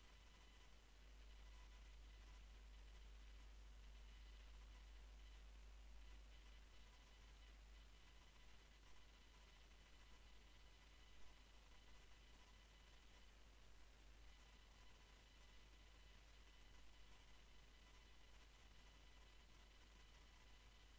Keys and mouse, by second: 2.0-6.5 drag, 9.1 e, 12.9 e, 17.6 ctrl+KP_Add, 18.4 s.